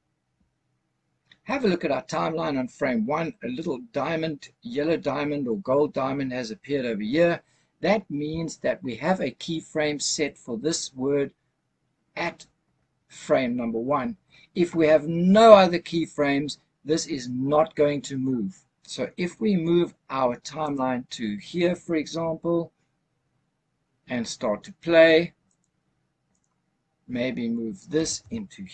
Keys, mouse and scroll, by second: 20.7 click, 25.4 click, 26.2 click, 27.8 g, 28.1 y.